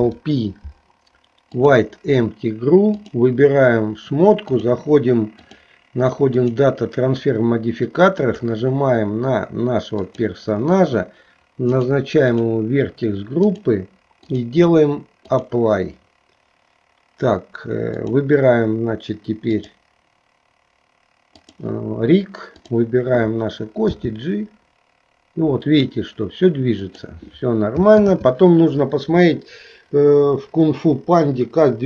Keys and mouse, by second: 3.0 click, 5.4-6.8 drag, 8.2 click, 11.9-13.8 drag, 14.4-15.6 drag, 18.0 click, 19.5-21.7 drag, 24.0 g, 28.1 ctrl+z.